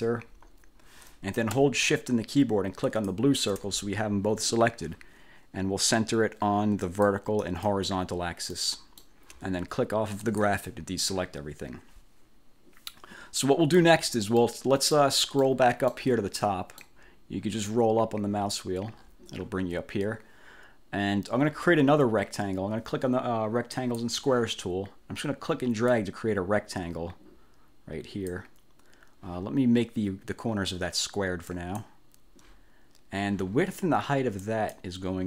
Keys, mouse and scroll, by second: 3.0 shift+click, 7.0 click, 7.5 click, 8.7 middle click, 9.1 click, 10.3 click, 14.5 middle click, 14.9 click, 15.5 middle click, 16.5 click, 17.8 scroll up 1, 18.4-18.7 scroll up 1, 19.1-19.8 scroll down 2, 20.1 scroll up 2, 23.9 click, 26.0-28.6 drag, 31.6 click, 34.5 click.